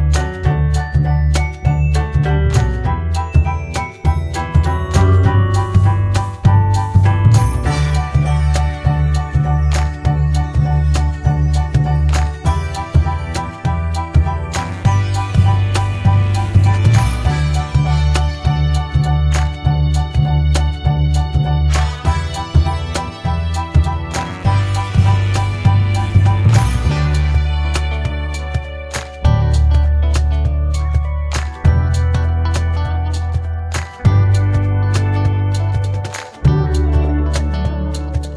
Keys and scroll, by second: 3.9-5.1 typing, 6.3-7.6 typing, 14.1-15.9 typing, 20.7 ctrl+c, 20.9 ctrl+v.